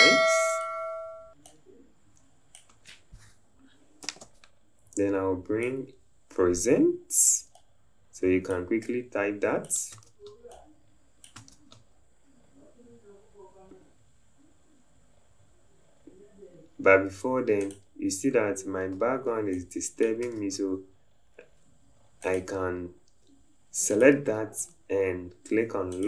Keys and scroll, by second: 10.2 ctrl+z.